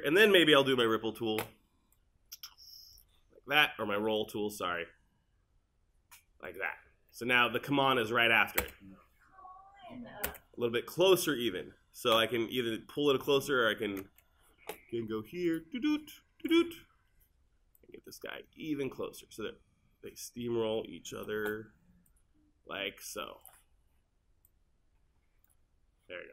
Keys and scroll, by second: 8.6 space.